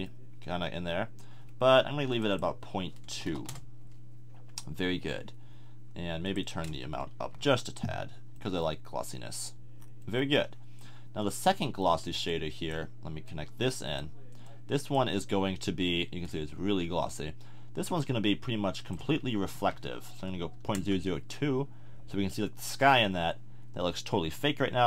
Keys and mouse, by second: 3.3 BackSpace, 12.3-13.9 drag, 17.0-18.8 middle drag, 18.8-22.9 drag, 19.7 0.